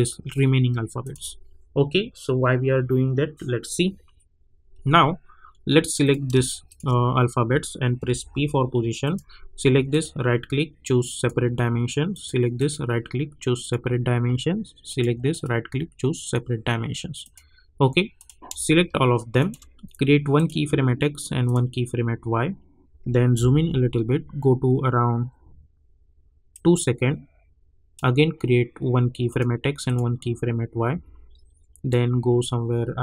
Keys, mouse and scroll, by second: 6.0 click, 6.6 shift+click, 8.0 p, 9.0 click, 9.9 right click, 11.1 click, 12.5 right click, 13.6 click, 15.3 right click, 16.2 click, 23.3 =, 26.5-29.3 drag, 30.9 =, 31.9 click.